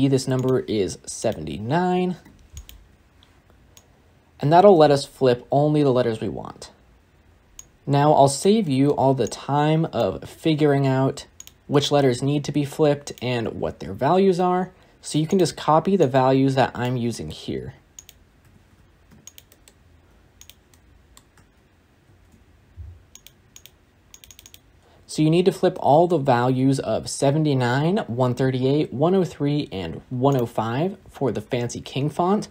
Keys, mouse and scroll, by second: 2.4-6.7 drag, 10.2 shift+d, 14.1 ctrl+shift+d, 16.7 click, 18.5 click, 20.1 ctrl+shift+d, 21.7 click, 22.6 shift+d, 24.3-24.7 drag.